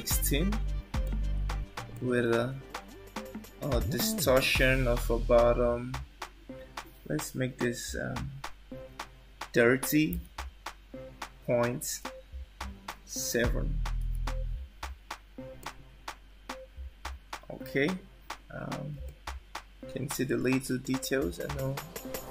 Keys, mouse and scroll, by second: 1.9 click, 19.2 middle click.